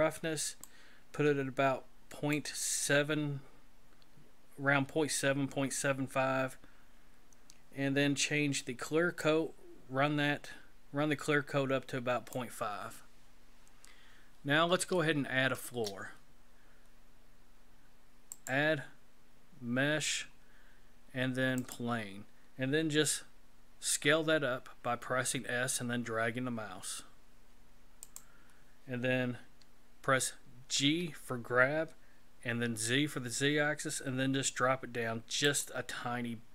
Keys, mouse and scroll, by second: 0.6 click, 4.1-4.9 scroll down 3, 4.9-5.6 scroll down 2, 5.6-7.6 scroll down 2, 9.2 click, 15.0 shift+middle click, 18.3 click, 23.0 s, 30.8 g.